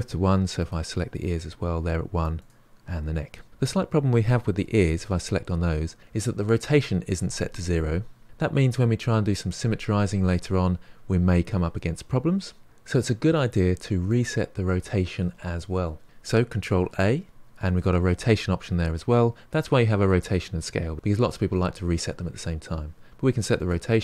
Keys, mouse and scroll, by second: 0.6 click, 2.4 click, 4.8 click, 8.2-10.5 scroll up 1, 16.8 ctrl+a.